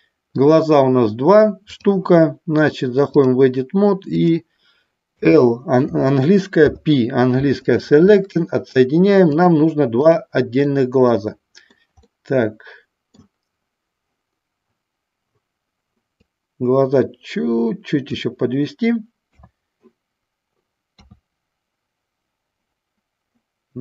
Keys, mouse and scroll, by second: 1.7-3.5 drag, 4.2 click, 9.6 click, 10.7 middle click, 11.5 middle click, 12.2-13.3 middle drag, 16.4-18.3 drag, 19.4 KP_2.